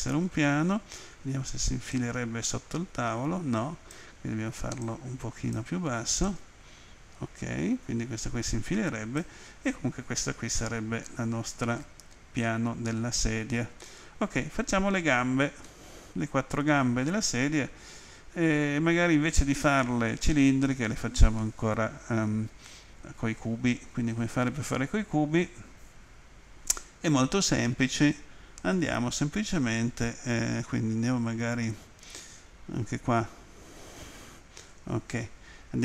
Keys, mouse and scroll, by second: 1.9 click, 4.8 click, 6.3 click, 10.6 middle click, 12.7 middle click, 13.8 middle click, 15.6 middle click, 32.9 Home.